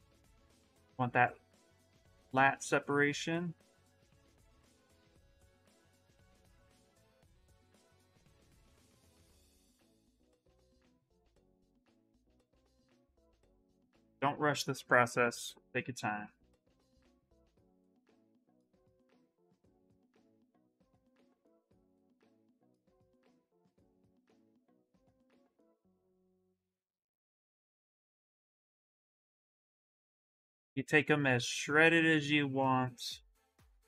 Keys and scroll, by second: 18.2-19.5 typing, 29.9 s.